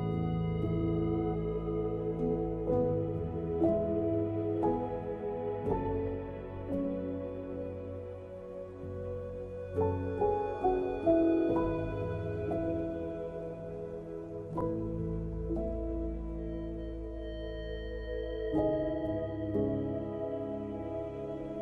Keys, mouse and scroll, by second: 0.0 Tab, 0.4 middle click, 1.1 KP_1, 1.7 g, 2.6 Tab, 2.8 click, 3.8 g, 4.8 s, 5.9 middle click, 6.5 scroll down 1, 6.6 middle click, 7.2 s, 8.1 middle click, 8.6 s, 9.3 middle click, 10.3 ctrl+s, 10.6 middle click, 11.6 middle click, 11.9 click, 12.3 Tab, 12.4 middle click, 13.0 click, 13.4 shift+click, 13.7 right click, 14.6 middle click, 15.0 click, 15.3 shift+click, 15.5 right click, 16.2 click, 16.6 click, 17.0 s, 17.9 middle click, 18.4 Tab, 18.6 middle click, 20.9 middle click, 21.3 click, 21.5 middle click.